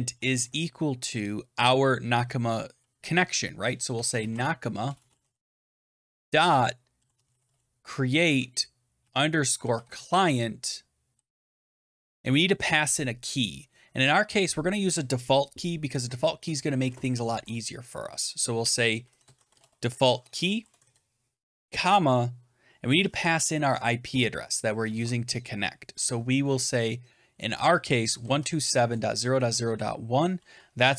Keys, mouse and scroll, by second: 3.6-12.2 typing, 18.6-21.3 typing, 23.9 shift+', 24.8 ctrl+z, 25.5-26.3 typing, 27.7-30.1 typing, 30.8 Right.